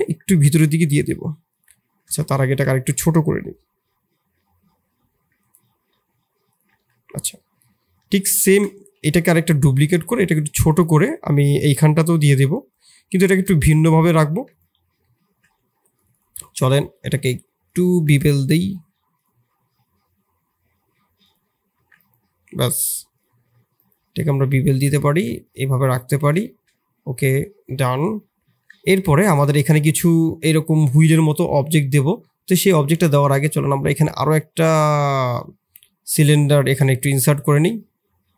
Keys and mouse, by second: 0.5 e, 2.1 ctrl+z, 2.4 ctrl+z, 3.5 i, 5.7 e, 6.7 Tab, 7.3 middle click, 8.5 shift+d, 10.0 s, 11.3 middle click, 12.3-12.9 drag, 12.9 middle click, 13.5 shift+click, 14.1 ctrl+a, 15.0 middle click, 15.2 Tab, 15.6 2, 15.9 click, 16.7 shift+middle click, 17.8 shift+click, 18.4-21.7 right drag, 21.7 Tab, 24.9 shift+middle drag, 26.4 shift+middle drag, 27.6-28.3 middle drag, 28.7 shift+middle drag, 36.9 middle click, 37.4 shift+a.